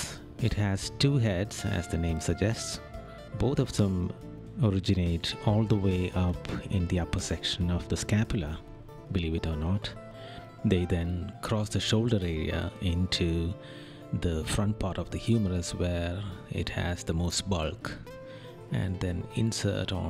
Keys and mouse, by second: 0.0 right click, 9.8 right click, 11.9 right click, 15.1 right click, 17.5 right click.